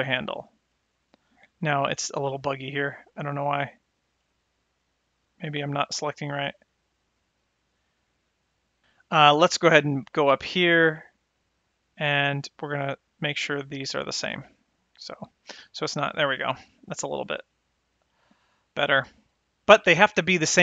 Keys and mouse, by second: 0.7 click, 4.2 click, 5.0 click, 6.1 click, 7.0 click, 12.6 click, 13.6 click, 15.0 click, 15.7 click, 16.9 click, 17.8 click, 18.9 click.